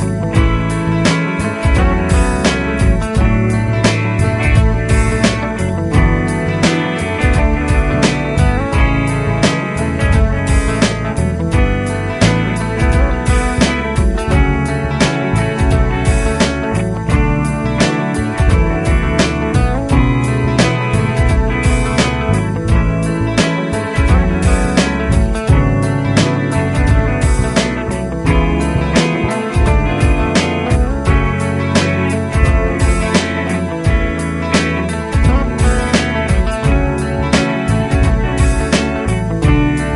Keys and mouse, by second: 5.5 Down, 5.8 Down, 12.3 ctrl+Left, 13.4 ctrl+Down, 13.8 ctrl+Down, 17.8 shift+\, 22.6 double click, 24.7 Right, 26.8 Right, 32.7 shift+click, 34.6 shift+click, 36.0 |.